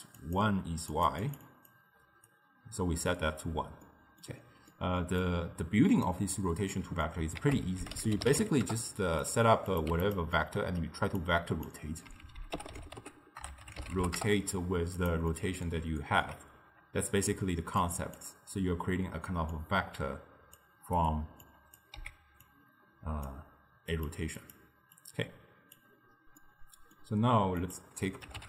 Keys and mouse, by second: 0.0-2.0 typing, 0.3 click, 1.0 click, 1.3 click, 1.5 drag, 2.3 right click, 3.3 d, 3.9-5.3 middle drag, 5.3 drag, 6.8-7.5 middle drag, 7.5 ctrl+a, 9.8 click, 10.4-11.3 middle drag, 11.3 drag, 15.4-17.8 middle drag, 17.8 click, 19.5 drag, 21.5 click, 22.1 x, 22.5 click, 24.0 click, 24.5 click, 25.0 click, 26.5-27.7 middle drag, 27.7-28.4 drag.